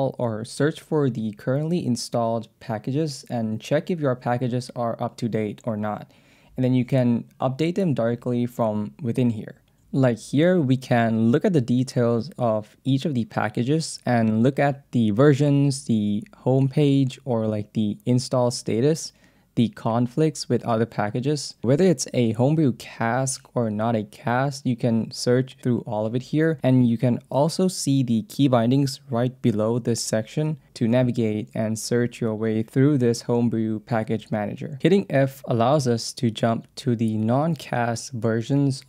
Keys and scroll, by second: 20.8 alt+/, 21.4 j, 21.8 k, 22.6 Escape, 22.7 j, 23.3 k, 24.0 Tab, 24.7 j, 25.4 k, 26.2 Tab, 26.4 j, 28.0 k, 29.9 j, 30.9 k, 34.5-35.9 typing, 38.1 j.